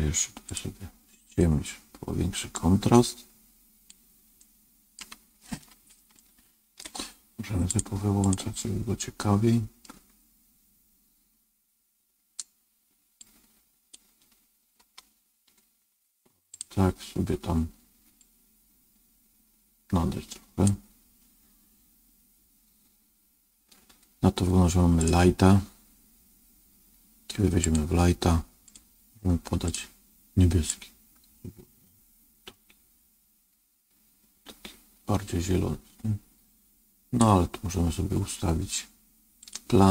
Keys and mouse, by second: 1.3-2.5 drag, 4.3 middle click, 6.2 shift+middle click, 7.6 click, 8.1 click, 8.9 middle click, 13.1 click, 27.5 click.